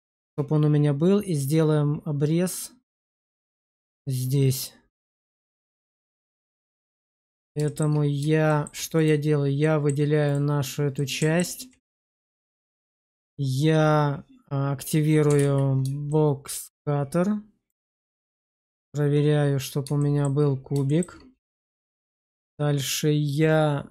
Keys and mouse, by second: 6.7-7.2 alt+middle drag, 7.5 shift+middle drag, 8.4 shift+middle drag, 9.5 middle drag, 10.1 click, 10.8-11.3 alt+middle drag, 11.8 alt+middle click, 12.7 shift+middle drag, 15.2 alt+w, 16.0-16.5 shift+middle drag, 17.6-19.4 middle drag, 19.9 shift+middle drag, 20.8 shift+middle click.